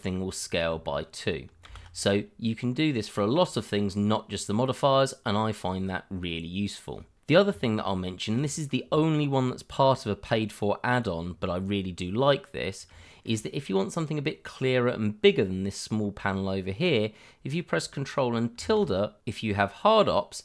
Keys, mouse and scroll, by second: 1.6 ctrl+z, 4.9-7.2 scroll up 1, 8.0 shift+middle click, 13.1 shift+middle click, 18.5 ctrl+`.